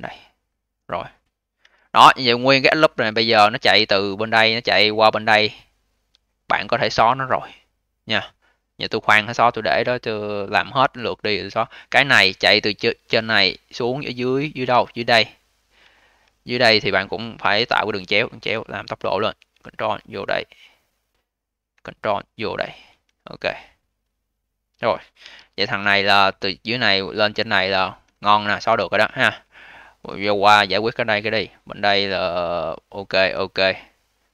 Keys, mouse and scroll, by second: 1.5 2, 2.0 click, 2.2 click, 2.6-3.7 scroll down 10, 3.7-4.4 scroll down 7, 4.4 alt+click, 5.1-6.1 scroll up 10, 6.1-7.1 alt+drag, 7.1-10.2 alt+middle drag, 11.6 click, 11.8 click, 12.7 scroll down 2, 13.1 alt+click, 13.7-14.4 scroll down 4, 14.4 alt+middle click, 14.8-15.8 scroll up 11, 15.8 alt+middle click, 16.2-17.3 scroll up 4, 17.3 1, 17.6-18.1 scroll up 3, 18.1 click, 18.8 click, 20.5 click, 21.2 click, 22.8-25.1 scroll down 7, 25.1 2, 25.5 click, 25.7 click, 26.1-26.7 scroll down 2, 26.7-27.2 scroll down 2, 27.2-28.5 alt+middle drag, 28.5 scroll down 1, 29.5 alt+middle click, 30.1 alt+click, 30.9-31.5 scroll up 3, 32.1 click, 32.3 click, 32.9 click, 33.1 click, 33.7-34.3 alt+middle drag.